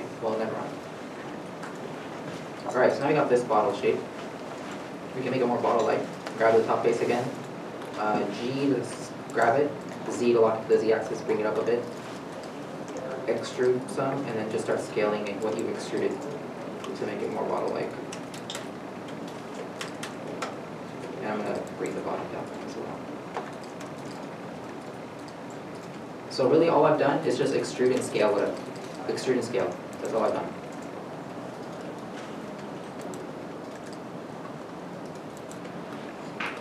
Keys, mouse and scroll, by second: 0.7-1.8 scroll down 1, 1.8 scroll, 2.3-2.9 scroll, 2.9 scroll down 1, 4.2 middle click, 4.9 scroll, 4.9 scroll up 1, 5.2-7.0 scroll, 7.0 middle click, 9.2 g, 12.7 z, 12.7 middle click, 13.5 e, 14.1 scroll up 1, 16.7 ctrl+z, 18.3 z, 19.1 middle click, 19.3-19.9 scroll down 1, 19.9-20.5 scroll down 3, 20.5 middle click, 22.0 g, 22.0 z, 22.8 middle click, 25.5 z, 26.1 alt+a, 28.4 scroll down 1, 30.1 middle click, 30.9 scroll up 1, 32.5 scroll down 1, 33.1-33.5 shift+scroll down 2, 33.7 middle click.